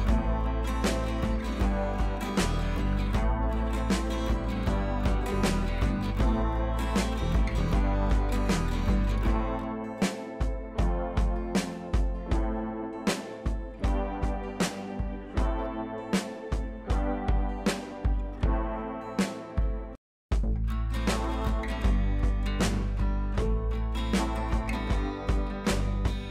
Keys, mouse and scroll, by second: 0.1-1.2 scroll up 1, 1.2 click, 2.8 ctrl+j, 3.2 ctrl+scroll up 1, 3.4 ctrl+t, 4.2 click, 4.7 right click, 5.3-7.4 drag, 8.8-10.5 drag, 10.8 scroll down 1, 11.4 scroll up 1, 14.1 click, 14.8 b, 16.0-16.4 [, 16.6 click, 19.3 ], 19.4 ], 19.6 click, 23.8 scroll down 1, 24.8 click, 25.2 [, 25.3 [, 25.4 click, 26.1 ctrl+z.